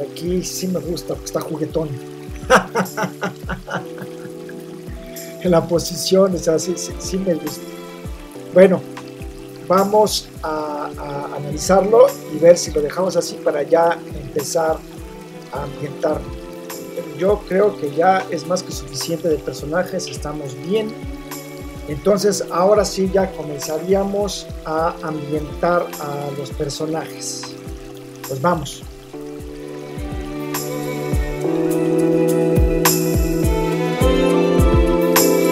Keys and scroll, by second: 31.0 super+c, 31.5 super++, 31.6 super+space, 32.1 v, 34.4 e, 35.4 super+z.